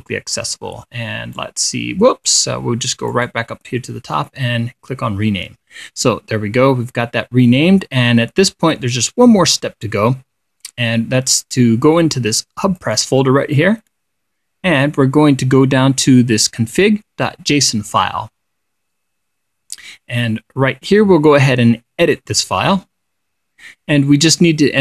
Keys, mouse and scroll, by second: 0.6 click, 1.8-3.0 drag, 3.6 click, 9.2-10.0 scroll down 4, 13.2 click, 15.3 scroll down 2, 18.3 click, 20.4-20.8 scroll down 2, 22.5 click.